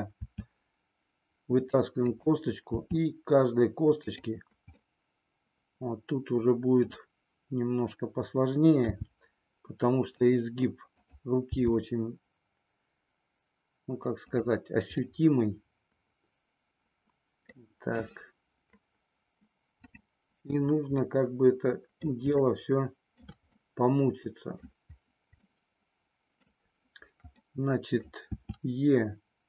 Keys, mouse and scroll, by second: 0.2 e, 2.8 e, 4.9-6.9 middle drag, 8.8 g, 10.0 click, 11.7 g, 15.1-17.6 middle drag, 15.1 scroll up 1, 20.9-22.0 middle drag, 22.4 shift+middle click, 23.6-24.6 middle drag, 25.4-26.4 middle drag, 27.4 middle click, 28.4 e.